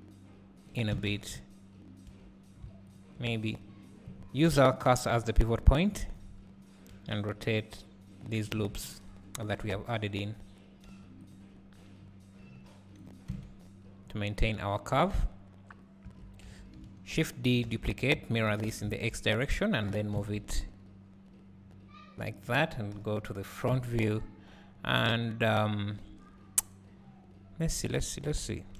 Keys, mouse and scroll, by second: 2.1 Tab, 3.0 alt+click, 6.9 r, 9.5 alt+click, 10.9 r, 13.3 Tab, 16.2 Tab, 16.5 a, 17.7 shift+d.